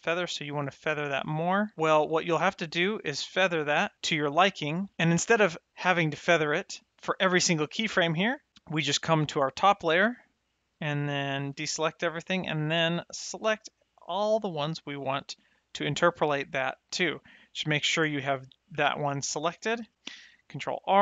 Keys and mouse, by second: 1.7 click, 2.7 click, 10.1 click, 11.5 a, 12.7 click, 17.8 click, 20.7 ctrl+r.